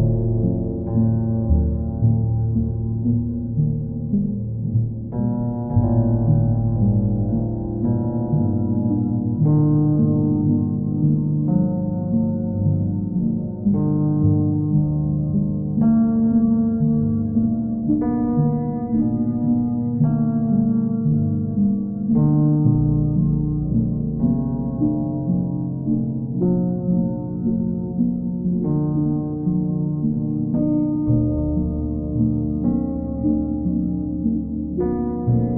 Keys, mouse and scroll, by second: 0.2 ctrl+click, 1.2 ctrl+click, 1.9 ctrl+click, 5.0 click, 7.6 ctrl+click, 8.2 ctrl+click, 8.7 ctrl+click, 9.8 ctrl+click, 12.0 click, 12.8 alt+click, 14.4 alt+click, 14.7 ctrl+click, 17.0 ctrl+click, 19.1 click, 19.4 ctrl+z, 19.8 ctrl+click, 21.1 click, 21.7 ctrl+click, 23.5 click, 24.1 click, 24.4 shift+click, 24.9 alt+click, 26.7 click, 27.1 shift+click, 28.0 click, 28.9 click, 29.3 shift+click, 30.6 click, 32.0 click, 32.3 shift+click, 32.9 alt+click, 35.3 ctrl+click.